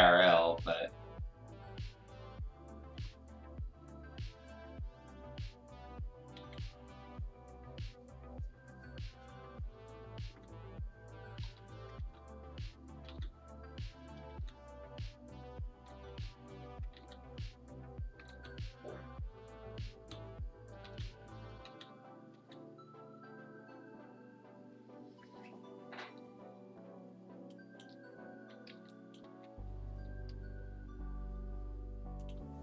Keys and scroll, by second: 0.5 ctrl+z, 2.9 ctrl+z, 6.4 x, 10.2 ctrl+z, 11.4 x, 12.0 ctrl+z, 13.0 ctrl+z, 14.3 ctrl+z, 15.8 ctrl+z, 16.0 ctrl+z, 16.9 ctrl+z, 18.2 ctrl+z, 19.9 z, 20.8 ctrl+z, 21.6 ctrl+z, 22.3 ctrl+z, 27.3 space, 28.7 space, 29.2 b.